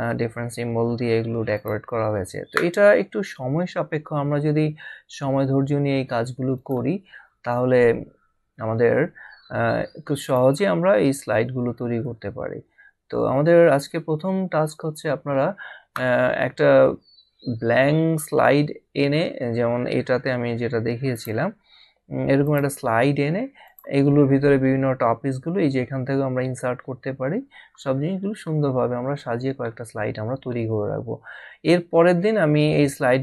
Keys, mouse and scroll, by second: 1.5 click, 6.5 click, 8.5 scroll down 1, 10.2 click, 15.9 scroll up 1, 18.2 scroll up 1, 21.1 click, 22.7 click.